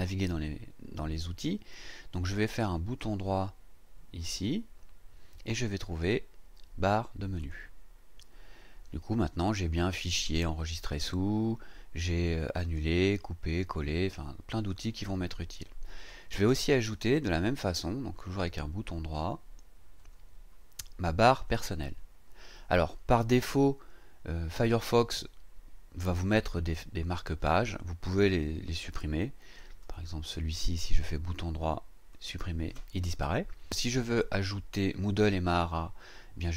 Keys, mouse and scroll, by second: 4.2 right click, 7.4 click, 10.3 click, 16.0 click, 20.0 right click, 21.5 click, 29.8 right click, 32.1 click.